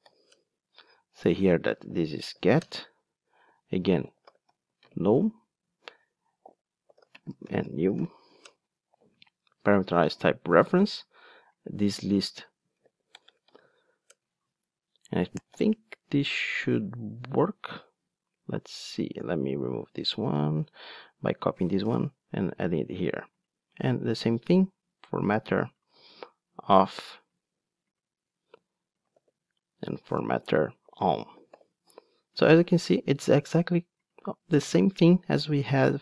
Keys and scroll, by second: 2.6 Return, 8.5 Return, 14.1 Return, 15.4 Return, 15.5 alt+super+l, 20.8 super+c, 26.0 super+c, 29.2 super+v.